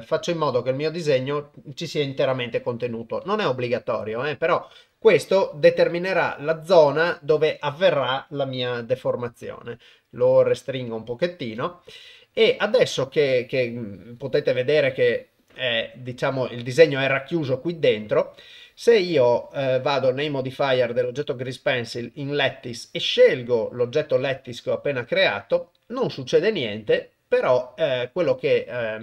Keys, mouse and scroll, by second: 2.3 g, 5.1-8.2 middle drag, 8.9 s, 9.8 middle click, 10.3 s, 11.2 middle click, 12.1 KP_0.